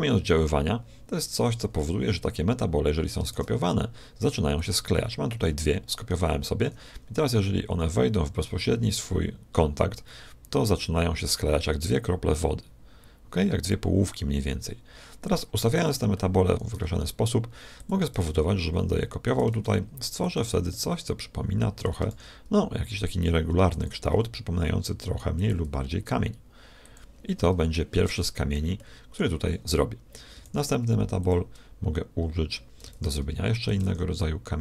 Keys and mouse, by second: 3.3 shift+d, 6.5 g, 16.7 g, 18.1 shift+d, 19.5 shift+d, 20.6-22.5 middle drag, 22.1 shift+d, 24.0 s, 25.5 g, 27.2-28.4 middle drag, 30.3 shift+d, 32.9 shift+d, 33.7 shift+d.